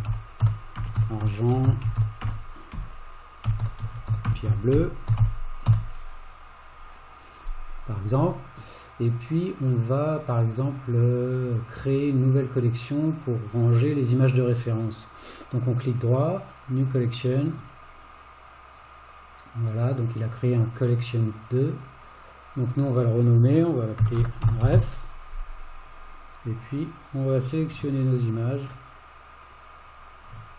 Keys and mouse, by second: 3.9 r, 15.1-16.9 right drag, 22.0-27.0 drag, 29.5 click.